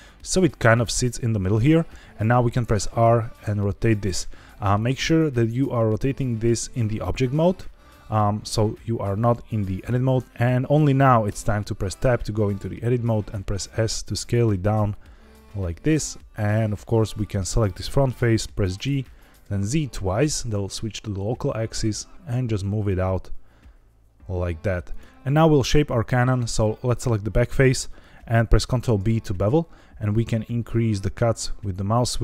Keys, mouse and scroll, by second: 0.2 click, 2.6 r, 4.7 click, 5.7-6.4 middle drag, 10.2 Tab, 11.2 Tab, 12.8 s, 15.3 click, 15.6 middle click, 16.9 click, 18.8 g, 19.3 z, 19.6 z, 24.8 click, 25.0 middle click, 25.6 middle click, 26.8 click, 28.7 ctrl+b, 30.0-31.8 scroll up 1, 32.0-32.2 scroll up 1.